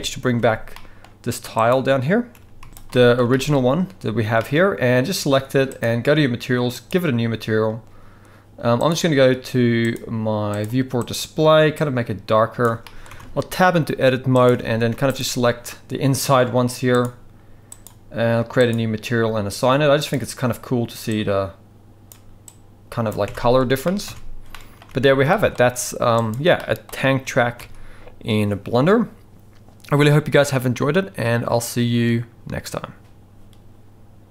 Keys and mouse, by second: 0.4 alt+a, 0.7 middle drag, 1.5 click, 2.4 g, 2.7 z, 2.9-3.2 middle drag, 3.3 shift+middle drag, 4.4-4.8 middle drag, 6.7 click, 8.9 click, 9.9 click, 10.5 click, 11.0 click, 12.8 middle click, 13.1 Tab, 14.4 click, 14.7 alt+a, 15.1 alt+shift+click, 17.7-18.1 drag, 18.6 click, 23.9 middle click, 24.1 Tab, 24.5 middle click, 24.9 alt+a, 25.3 shift+middle drag, 26.6 middle click, 27.2 g.